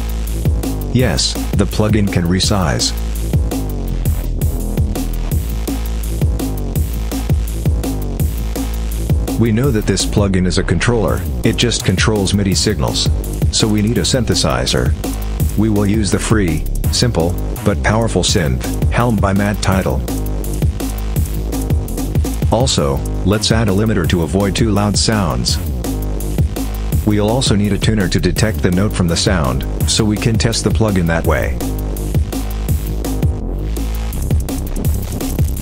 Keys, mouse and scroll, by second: 0.3-8.6 drag, 9.5 click, 12.8 click, 14.2-14.8 drag, 15.6 h, 16.0 e, 16.5 l, 16.8 m, 18.4 click, 19.8 click, 20.7-21.1 drag, 22.4 e, 22.7 v, 22.9 e, 23.4 n, 25.0 click, 26.5 click, 27.3 click, 29.6-31.6 typing, 33.0 click, 34.3 click, 35.3-35.6 drag.